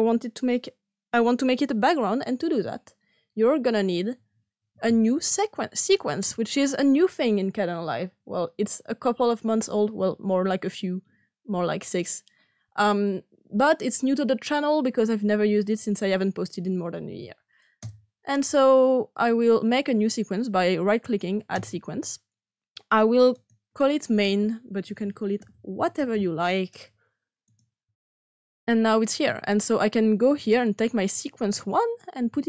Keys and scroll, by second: 25.1-26.6 typing.